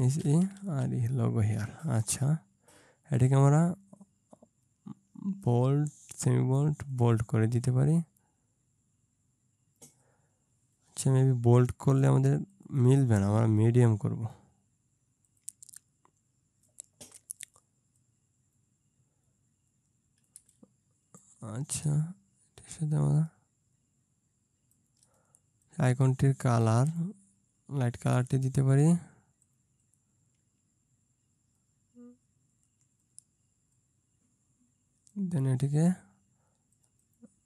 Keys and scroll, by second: 0.3 shift+e, 0.5 shift+r, 0.8 shift+e.